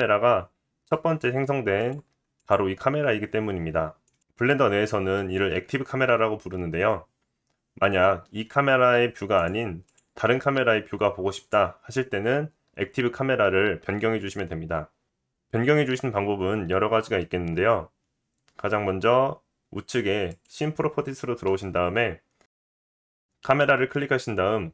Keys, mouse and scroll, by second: 1.8 click, 2.4 click, 2.9 g, 8.3 g, 9.8 click, 10.3 g, 20.9 click, 21.1-23.0 middle drag, 23.0-24.7 drag.